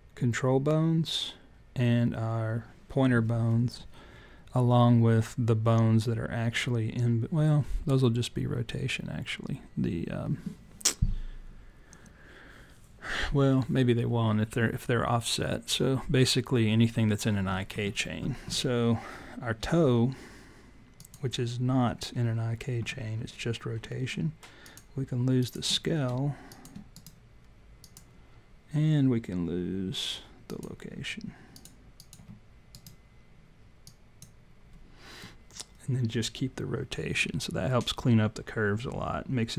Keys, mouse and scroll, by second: 20.9 click, 24.6 click, 25.3 shift+click, 26.9 right click, 30.4 click, 31.5 shift+click, 32.7 right click.